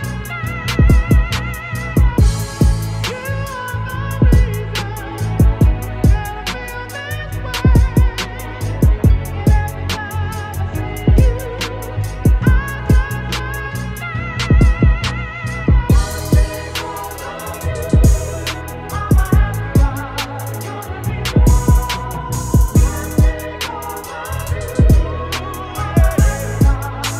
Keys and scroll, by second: 7.3 Return, 8.6 ctrl+t, 11.8 Return, 16.0 Return.